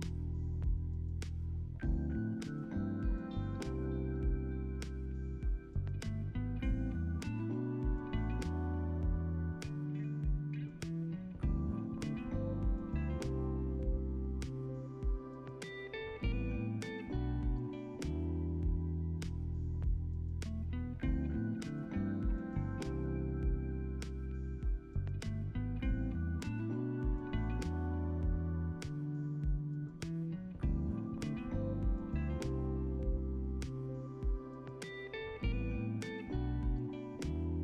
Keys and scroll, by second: 3.7 ctrl+s, 4.6 space, 6.5 ctrl+s, 14.6 Delete, 16.6 Delete, 19.3 Delete.